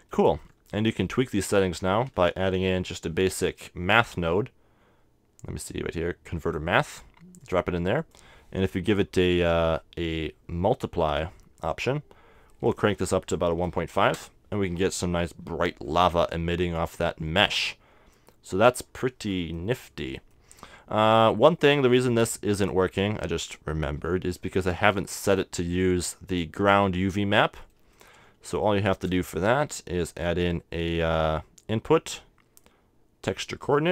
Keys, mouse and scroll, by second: 2.0 shift+a, 7.6-10.0 drag, 12.7-14.5 drag, 15.8 middle click, 17.2-19.0 middle drag, 19.6-20.7 middle drag, 21.7-23.6 drag, 23.6-24.8 middle drag, 27.8-29.8 middle drag, 28.8 shift+a.